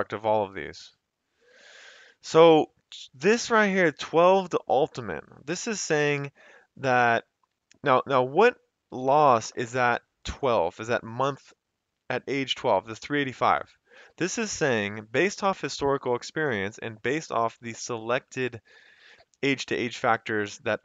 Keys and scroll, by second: 2.1 Escape.